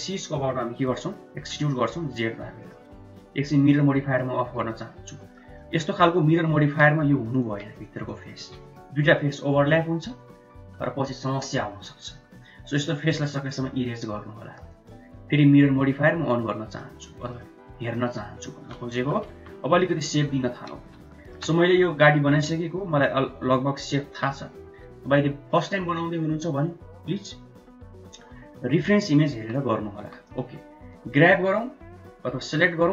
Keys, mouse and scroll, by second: 4.4 click, 4.7 middle click, 5.5 middle click, 6.3 middle click, 6.9 3, 7.2 click, 13.1 x, 16.3 click, 16.7 middle click, 17.9 middle click, 18.8 KP_1, 19.2 KP_3, 20.1 Tab, 20.8 shift+z, 21.1 shift+middle click, 29.3 Tab, 30.0 1, 30.3 click.